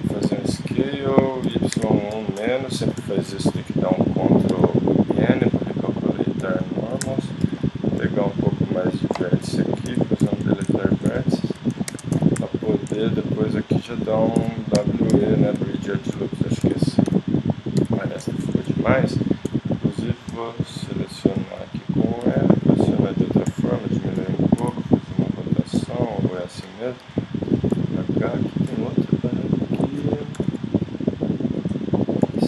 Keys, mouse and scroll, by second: 0.2 s, 3.3 ctrl+n, 4.5 g, 5.9 middle click, 6.2 middle click, 7.4 ctrl+KP_Add, 9.1 ctrl+KP_Subtract, 9.9 x, 11.9 ctrl+Tab, 12.7-14.4 drag, 14.4 w, 16.6 x, 17.8 KP_3, 18.1 middle click, 18.8 middle click, 19.5-22.2 typing, 20.3 click, 23.4 s, 24.7 r, 25.8 g, 27.0 alt+h, 29.6 click, 30.4 g, 32.2 s.